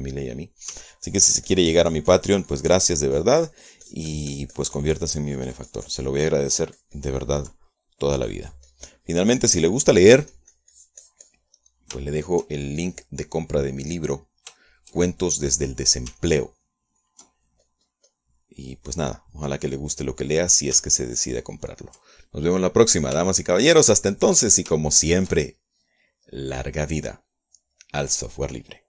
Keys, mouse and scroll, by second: 0.3 ctrl+middle click, 1.0-2.4 ctrl+middle drag, 2.4-9.2 ctrl+drag, 9.3 ctrl+middle click, 9.9-13.1 drag, 13.2 middle click, 13.7 shift+middle click, 14.0 shift+scroll down 1, 14.1 shift+middle click, 14.9-16.1 middle drag, 16.2 shift+middle click, 17.0 middle click, 17.8 ctrl+click, 18.2 ctrl+click, 18.6 ctrl+click, 19.3 ctrl+click, 21.1 middle click, 21.5 scroll up 1, 21.7 middle click, 22.1-22.6 scroll up 1, 22.6 ctrl+click, 23.7 ctrl+middle click, 24.3-24.7 scroll up 1, 24.9 shift+middle click, 25.5 shift+middle click, 26.5 shift+middle click, 27.7 middle click.